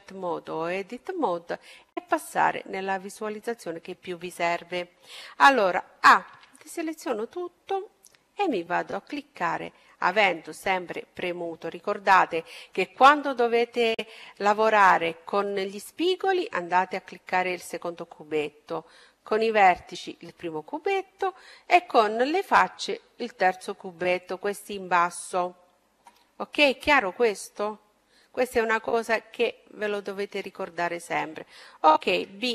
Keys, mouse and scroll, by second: 0.6 click, 3.9-6.2 middle drag, 6.2 a, 7.7-9.7 right drag, 9.7-11.6 drag, 26.1-28.1 middle drag, 28.1-29.8 right drag, 32.0 b.